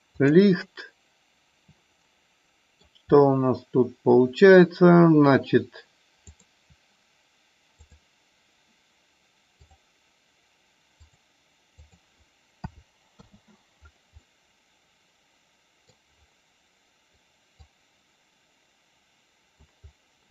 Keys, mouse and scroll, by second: 0.1 click, 2.0 middle click, 6.4 click, 8.0 click, 11.1 click, 11.7-13.2 drag, 14.1-14.5 middle drag, 14.7-15.2 middle drag, 15.4-15.9 middle drag, 17.6-19.6 drag.